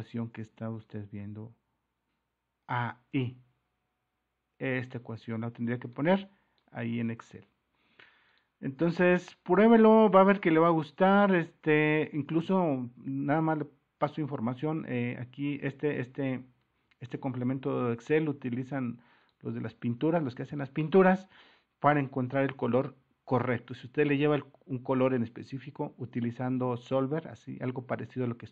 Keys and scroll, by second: 1.1 super+-, 16.0 alt+Tab, 16.6 alt+Tab.